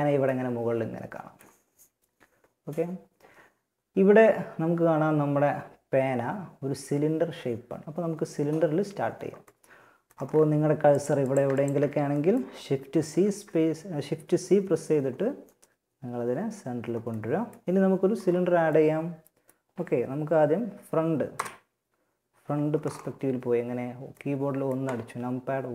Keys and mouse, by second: 10.2-11.4 drag, 12.1 shift+c, 16.4-17.4 middle drag, 20.5 KP_1.